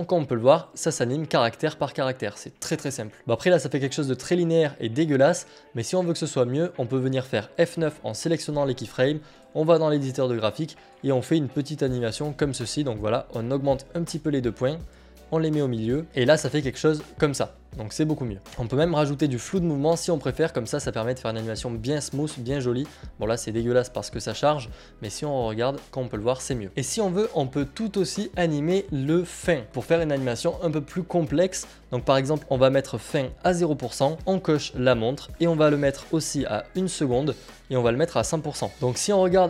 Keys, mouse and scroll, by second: 3.2 click, 9.0 F9, 9.1 click, 13.0 click, 15.3 click, 16.0 click, 18.4 click, 19.8 click, 20.6 click, 26.3 click, 29.4 ctrl+click, 34.2 click, 38.7 click.